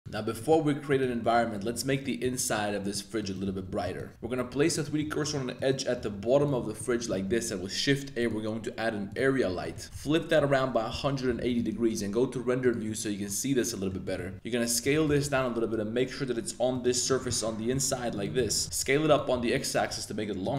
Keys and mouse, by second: 0.0 shift+middle click, 0.3 middle click, 0.9 click, 1.1 shift+middle drag, 1.5 middle click, 2.0 middle drag, 2.3 shift+middle drag, 2.8 middle drag, 3.2 click, 3.4 Tab, 3.7 3, 3.8 click, 4.1 Tab, 4.2 Tab, 4.5 2, 4.6 click, 4.8 middle click, 5.2 shift+middle click, 5.5 click, 6.0 shift+s, 6.6 Tab, 6.7 middle click, 7.0 shift+click, 7.3 shift+a, 9.6 middle click, 9.8-11.2 typing, 11.4 click, 13.2-13.9 middle drag, 14.0 shift+middle click, 14.3 s, 15.0 g, 15.2 y, 16.7 click, 16.9 middle click, 17.3 shift+middle click, 17.7 s, 18.3 s, 18.4 x, 18.6 click, 19.3 s.